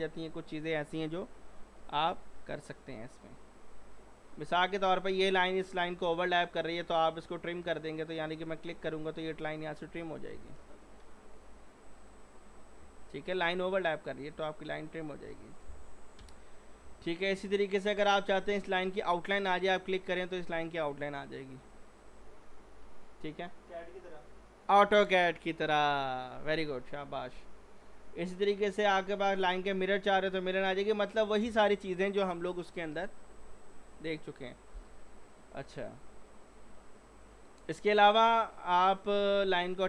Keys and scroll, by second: 10.7 ctrl+z.